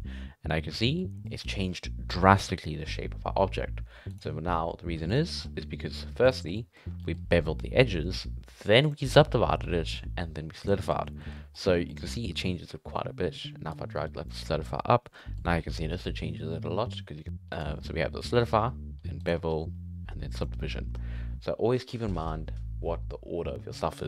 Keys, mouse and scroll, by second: 0.7-1.1 middle drag, 1.1 scroll down 1, 1.2-4.1 middle drag, 4.1 click, 5.0 click, 5.4-6.1 scroll up 4, 6.2 click, 6.4 scroll up 1, 6.5-8.8 middle drag, 8.8 click, 10.5 click, 10.9 scroll down 7, 11.0 middle click, 11.2-11.5 scroll up 8, 11.5 middle drag, 11.8 middle drag, 13.7-14.2 drag, 15.0 scroll up 3, 15.1-17.5 middle drag, 17.5 click, 19.2 click, 19.4-20.0 scroll down 2, 20.0-20.3 scroll down 5, 20.3 click, 20.9-21.5 scroll down 1, 21.5 scroll down 2.